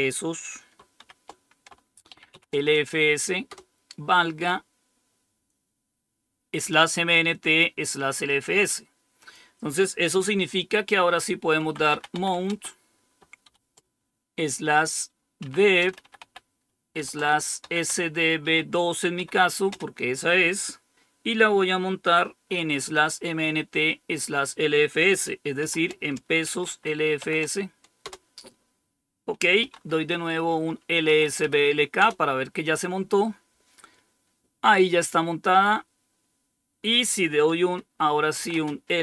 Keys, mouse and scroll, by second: 0.9-2.7 typing, 3.4 Return, 7.2 click, 9.1 click, 11.5-13.3 typing, 15.3-19.6 typing, 26.1-28.0 typing, 29.3-32.5 typing, 38.0-39.0 typing.